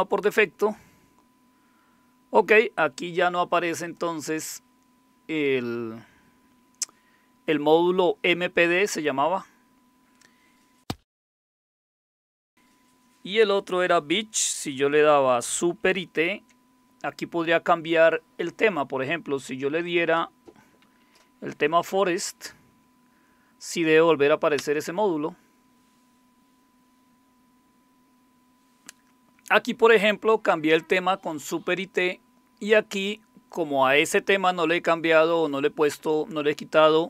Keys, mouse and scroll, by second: 3.8 click, 8.9 click, 16.2 super+t, 20.6 Down, 20.8 Down, 21.0 Down, 24.6 Return.